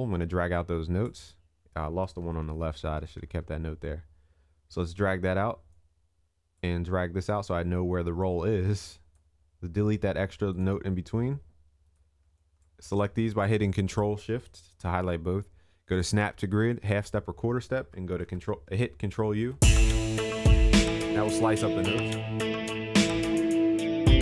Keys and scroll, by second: 2.3 ctrl+alt+z, 18.3 ctrl+u, 20.2 ctrl+s.